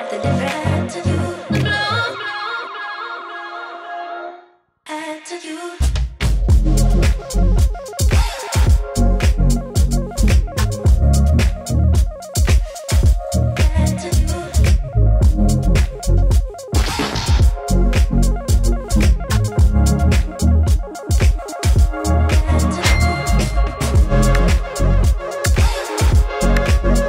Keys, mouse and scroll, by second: 3.3-14.1 drag, 13.7 Delete, 15.7-27.0 drag.